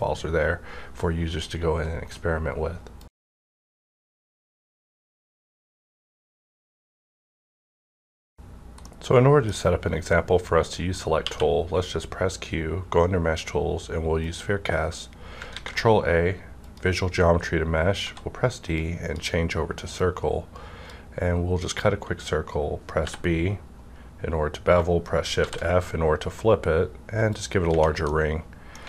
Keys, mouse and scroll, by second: 9.6 scroll up 1, 9.7-11.2 drag, 11.2 q, 14.2 click, 14.2 q, 15.0 scroll up 1, 15.5 ctrl+a, 16.5 click, 18.0 d, 18.7-24.1 drag, 23.0 b, 24.1-24.8 scroll down 1, 25.4 shift+f, 27.3 click, 28.1-28.8 middle drag.